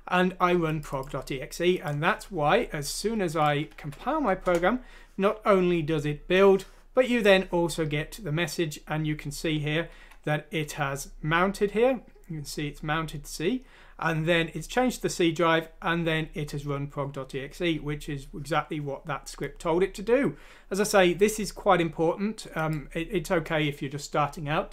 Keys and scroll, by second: 3.7 F6, 4.4 Return, 10.2 Escape.